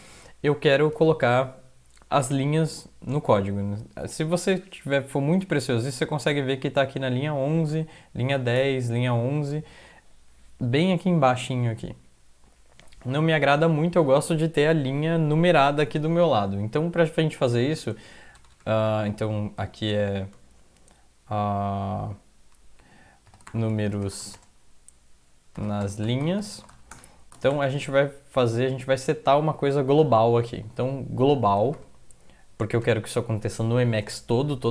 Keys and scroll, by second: 7.7 Up, 8.6 Down, 17.6-18.4 typing, 23.1-28.0 typing, 28.3 Left, 31.2-33.3 typing.